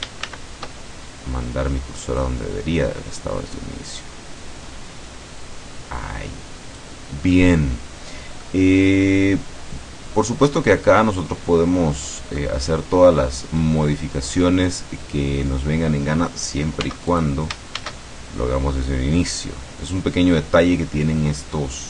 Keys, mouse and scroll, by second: 0.3 shift+c, 2.3-7.1 drag, 7.4-8.7 middle drag, 11.5-12.8 scroll down 3, 13.7-14.8 scroll down 2, 14.8 scroll down 1, 15.5 scroll up 2, 16.9 x, 17.2 click, 17.8 shift+a, 19.2 click.